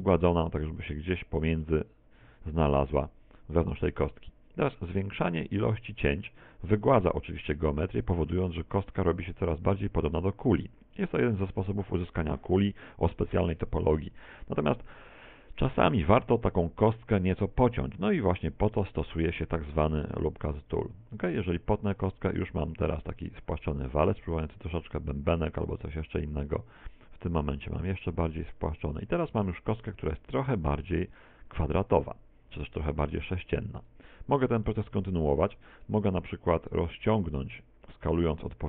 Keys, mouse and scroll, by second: 0.9 middle click, 1.8 z, 2.2 z, 2.5 Tab, 2.9 middle click, 6.3 click, 6.8 click, 7.8 scroll up 4, 8.5 shift+middle click, 9.1 middle click, 10.2 middle click, 10.5 click, 11.0 click, 18.8 ctrl+r, 20.8 click, 22.2 middle click, 25.6 ctrl+r, 27.2 click, 27.8 ctrl+r, 28.7 click, 29.2 Tab, 29.9 middle click, 31.2 middle click, 34.2 Tab, 34.6 middle click, 35.5 a, 36.1 alt+shift+right click, 36.7 alt+shift+right click, 37.4 s.